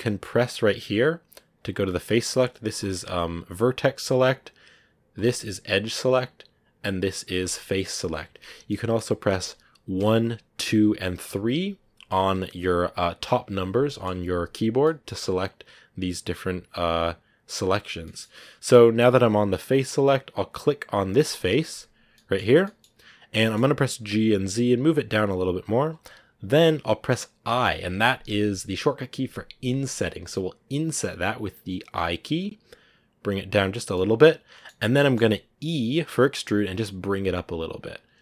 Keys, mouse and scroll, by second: 0.2-3.6 drag, 3.6-5.0 right drag, 5.0 click, 5.9-7.3 right drag, 7.3 click, 7.9 right click, 8.6-9.9 middle drag, 9.9 1, 10.5 2, 11.2 3, 13.7-17.7 middle drag, 17.8 scroll down 1, 17.9-20.3 middle drag, 20.3-21.6 drag, 21.6 right click, 22.0-23.9 middle drag, 23.9 g, 27.4 i, 33.8-35.8 middle drag, 35.8 e.